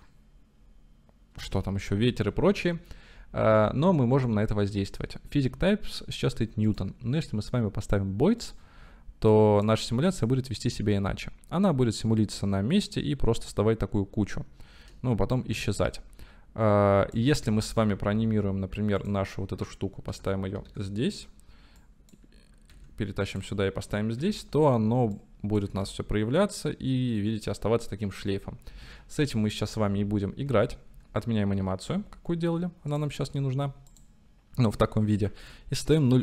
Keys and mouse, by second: 1.9-2.7 middle drag, 1.9 space, 6.7-8.6 drag, 9.4 click, 10.0 space, 15.6 space, 15.9-17.3 drag, 20.1 o, 20.7 i, 21.8 click, 22.8 g, 24.2 i, 25.1-25.7 drag, 25.8 space, 28.9 space, 29.3 ctrl+z, 29.8 ctrl+z, 30.5 ctrl+z, 31.0 ctrl+z, 32.1 ctrl+z, 33.5 drag, 34.0 click, 35.3 shift+a.